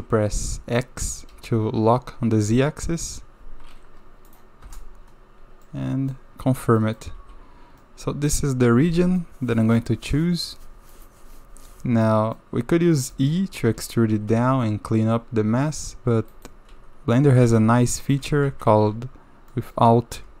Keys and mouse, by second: 5.7-6.1 drag, 6.8 click, 7.3 3, 7.8-9.2 drag, 10.9 click, 12.1 click, 12.9 click, 13.6 e, 17.4 g, 18.4 ctrl+z, 19.5 click.